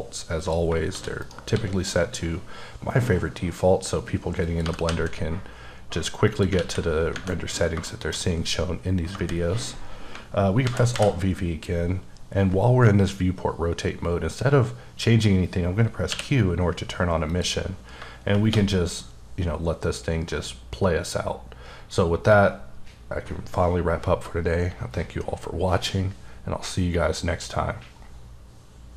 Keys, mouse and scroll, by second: 0.4 click, 0.9 shift+d, 1.2 right click, 1.5 s, 4.4 click, 4.6 g, 4.9 z, 6.3 click, 6.6 alt+a, 7.0 scroll down 1, 7.5-7.9 scroll down 2, 7.9 shift+middle click, 9.1 KP_0, 10.7 alt+v, 16.1 q, 17.3 click.